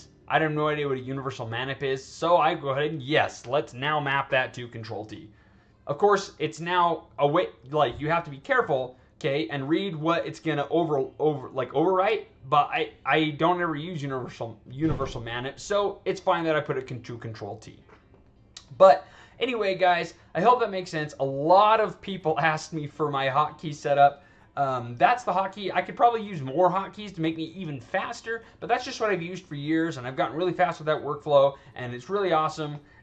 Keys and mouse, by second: 4.0 click, 20.7 click, 32.0 click, 32.7 click.